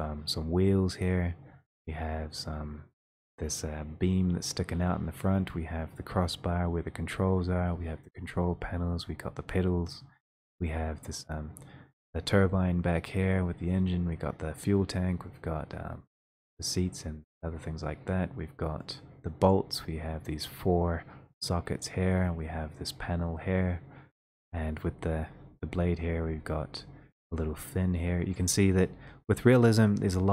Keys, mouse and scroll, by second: 19.5 click.